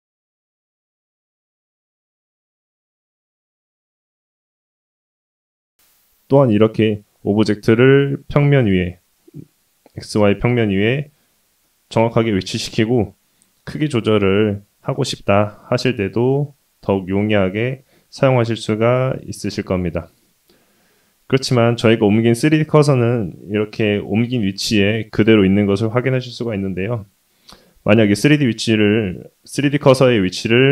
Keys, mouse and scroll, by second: 8.2 shift+middle click, 9.9 middle click, 11.6 KP_1, 13.0 s, 16.3 shift+middle click, 18.2 shift+middle click, 20.1 middle click, 25.5-27.1 scroll down 1, 27.1 x.